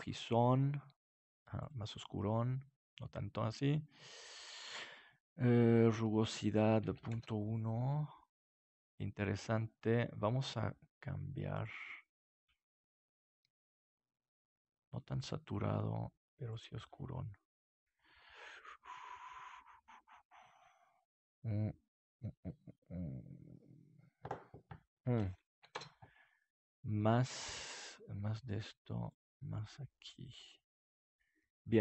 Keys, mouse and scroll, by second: 6.6 click, 7.5 click, 11.8-13.0 drag, 25.2 click, 26.4 click, 28.0-29.0 drag.